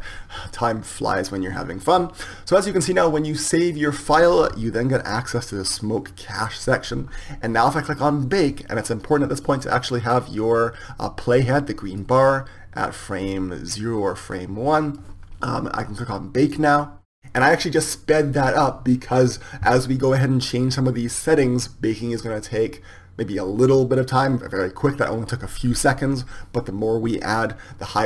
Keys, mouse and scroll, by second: 0.0-3.5 drag, 10.1-17.5 drag.